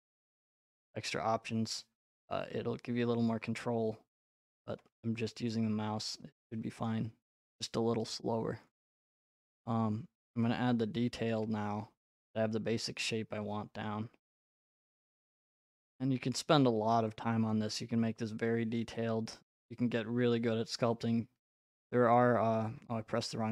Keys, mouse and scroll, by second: 0.5 click, 2.7-4.1 scroll, 4.1 scroll, 6.9 right click, 8.8 click, 11.3 middle click, 11.5 middle click, 11.6 middle click, 11.6 middle click, 13.6 scroll, 13.8 right click, 16.3 click, 17.5 click, 18.8 right click, 19.5-20.3 scroll, 20.3 right click, 22.2 ctrl+click.